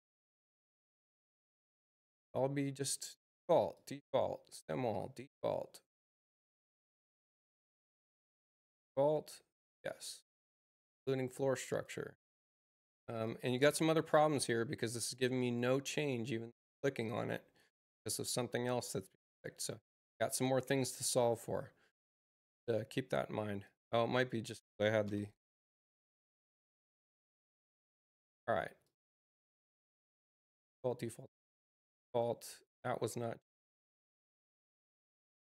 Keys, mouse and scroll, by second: 2.1 click, 3.7 click, 4.9 click, 8.5 click, 11.6 click, 12.7 click, 13.2 click, 13.6 click, 14.1 click, 14.5 click, 14.9 click, 15.3 click, 16.4 click, 16.9 click, 21.1 click, 23.6 ctrl+click, 25.0 e, 28.8 click, 32.0 click, 35.3 click.